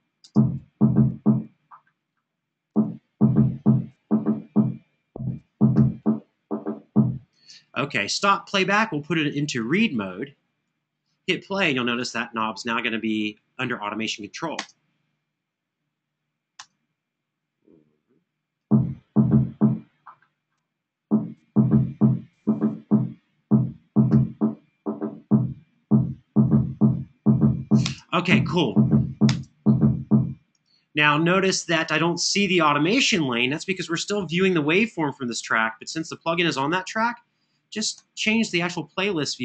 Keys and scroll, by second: 0.0 space, 7.1 space, 14.3 space, 16.4 space, 27.6 space, 29.0 space.